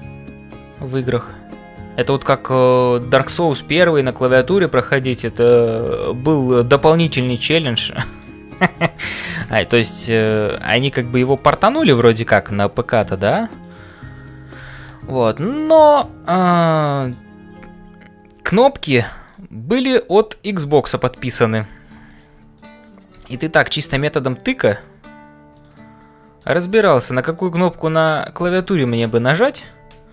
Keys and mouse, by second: 0.0-30.1 typing, 7.2 shift+middle click, 7.6 middle click, 8.6 click, 9.1 middle click, 14.1 click, 15.1 middle click, 16.8 middle click, 19.8 middle click, 20.5 click, 22.5 click, 23.6 middle click, 25.6 click, 26.1 middle click, 29.2 shift+middle click, 29.6-30.1 middle drag.